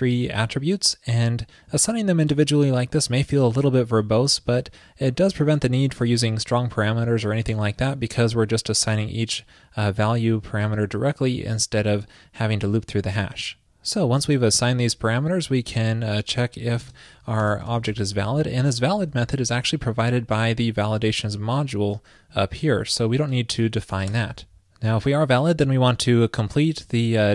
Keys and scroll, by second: 14.6 super+Return, 18.9 alt+shift+Left.